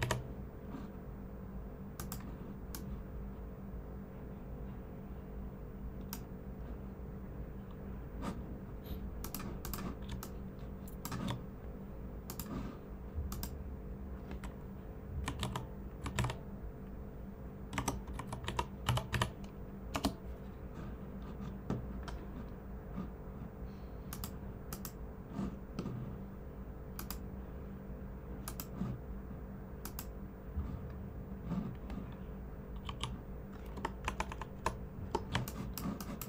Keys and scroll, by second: 10.0-10.6 typing, 15.0-16.6 typing, 17.7-19.9 typing, 32.8 typing, 34.0 super+=, 34.2 super+=, 34.5 super+=, 35.3 space, 35.8 space, 35.9 space.